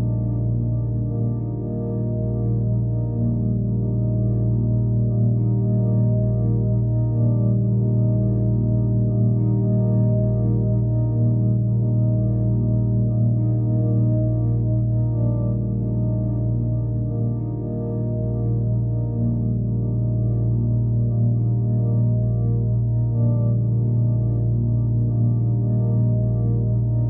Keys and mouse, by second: 2.4 alt+middle click, 3.0 g, 4.4 ctrl+a, 4.9-5.6 right drag, 6.7 shift+click, 7.8 g, 9.5 click, 11.1 click, 12.9 click, 14.5-15.2 alt+middle drag, 16.9 click, 21.2 alt+click, 22.0 middle drag, 22.4-24.7 alt+middle drag, 26.2 click.